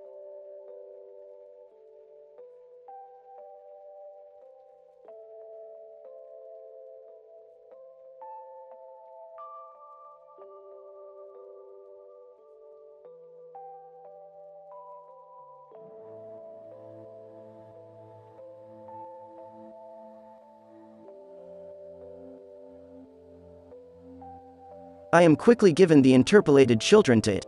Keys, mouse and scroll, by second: 0.5 ctrl+z, 0.6 f, 1.0 f, 2.5 f, 3.2 f, 4.7 f, 5.5 ctrl+z, 5.8-6.3 drag, 6.5 alt+a, 6.6 b, 7.0 b, 8.1 ctrl+l, 8.5 Delete, 8.9 f, 9.3-10.3 drag, 9.7 f, 10.0 ctrl+z, 10.2 f, 10.6 n, 11.7 f, 12.0 ctrl+z, 12.2 ctrl+z, 12.8-14.3 drag, 14.3 f, 15.9 f, 16.2 click, 17.1 f, 17.7 f, 18.1-18.7 drag, 18.5 f, 18.8 drag, 21.4 f, 24.4 alt+a, 25.7-26.2 drag, 27.4 alt+a.